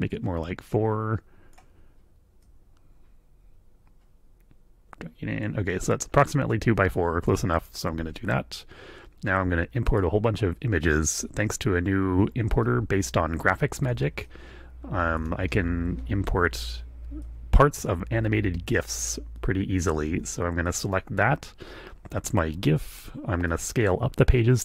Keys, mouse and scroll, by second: 2.4-5.6 shift+drag, 5.8 click, 7.6 click, 9.8 click, 12.6 ctrl+click, 14.0-15.3 super+drag, 17.2 click, 19.8 click, 20.6 click, 23.5 click.